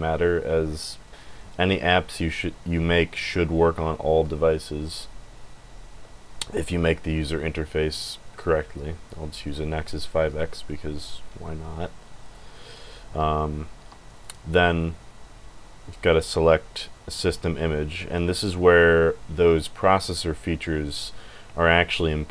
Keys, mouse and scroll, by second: 0.7 click, 1.3 click, 11.0 click, 12.2 click, 13.1 Escape, 13.8 Escape, 14.1 click, 14.7 click.